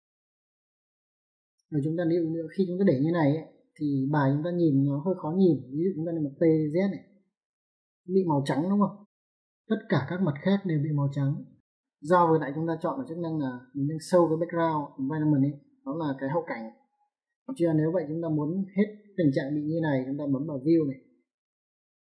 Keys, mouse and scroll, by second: 5.6 click, 6.4 t, 6.9 z, 9.1 l, 9.9 z, 20.1 click.